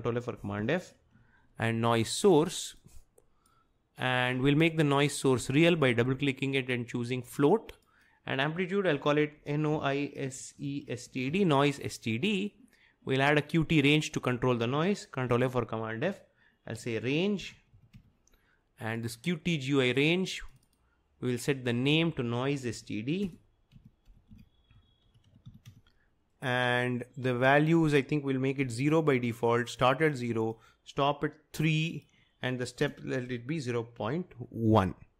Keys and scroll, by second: 0.0-1.2 typing, 8.8-11.8 typing, 15.3 ctrl+f, 16.6-18.4 typing, 22.8-26.2 typing, 28.7 0, 31.6 3, 32.9-35.1 typing.